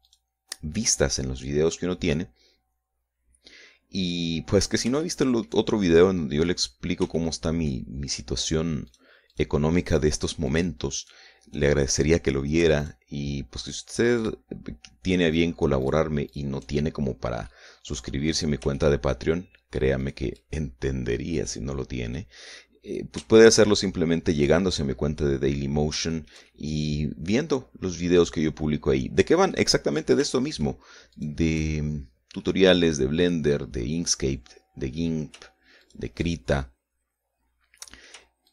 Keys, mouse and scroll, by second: 0.6 shift+right click, 2.0 scroll down 1, 2.5-4.9 middle drag, 5.1 scroll up 2, 5.6 shift+middle click, 6.6 middle click, 7.3 scroll up 2, 7.7 shift+middle click, 9.4 shift+right click, 11.0 shift+right click, 11.6 shift+right click, 13.4 shift+right click, 14.3 shift+right click, 14.8 shift+right click, 15.9 shift+right click, 16.4 shift+right click, 16.9 shift+right click, 17.4-17.8 shift+scroll down 1, 18.0 middle click, 19.2 shift+scroll up 1, 19.4 shift+middle click, 20.6 shift+right click, 21.5 scroll down 2, 21.9-23.0 middle drag, 23.4 scroll down 2, 23.5 scroll up 2, 23.8 shift+scroll down 2, 23.9 shift+middle click, 24.6 shift+middle click, 25.3 shift+scroll up 3, 25.7 scroll down 2, 26.7-30.3 shift+middle drag, 30.9 shift+middle click, 31.7 shift+right click, 32.6-32.9 shift+scroll down 1, 33.0-35.8 middle drag, 36.4 shift+right click, 37.0-38.5 shift+middle drag.